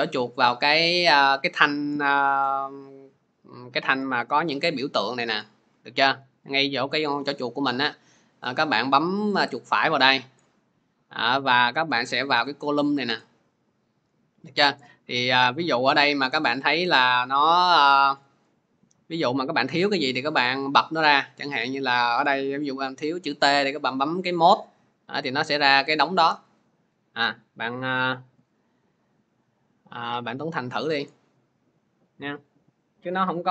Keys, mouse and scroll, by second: 0.0 click, 9.3 right click, 14.3 right click, 18.2-19.7 drag, 19.7-24.2 right drag, 24.2-27.6 drag, 27.6 alt+Tab.